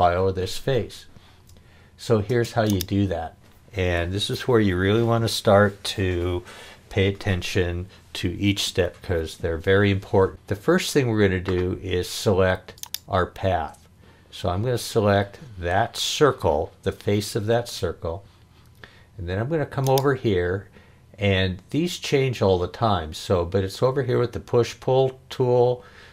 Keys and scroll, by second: 2.3 space.